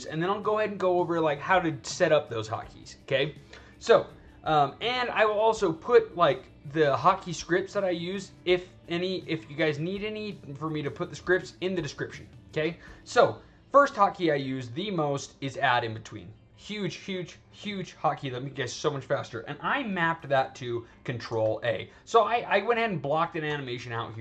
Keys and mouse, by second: 4.7 click, 17.9 click, 20.6 click, 22.2-23.3 drag, 23.6 alt+right click.